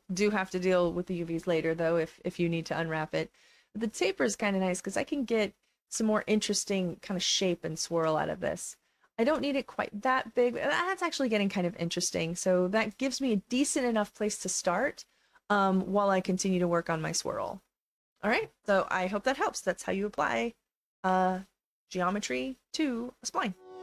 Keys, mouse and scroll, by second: 2.5-5.8 drag, 6.1-7.7 alt+drag, 8.5 click, 9.6 alt+click, 10.3 alt+middle click, 10.6 alt+click, 11.6 alt+middle click, 11.9 alt+click, 12.5 alt+middle click, 12.9 alt+click, 14.0 alt+middle click, 14.3-16.6 alt+drag, 16.8 alt+scroll up 1, 17.2 alt+click, 17.8 alt+middle click.